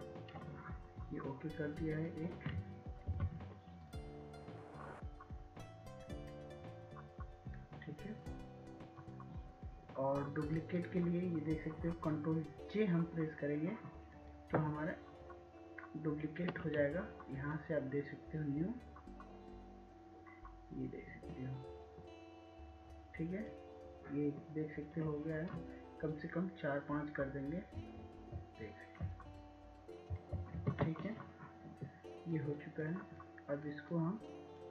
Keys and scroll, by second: 4.9 ctrl+t, 29.9 ctrl+j, 30.6 ctrl+j.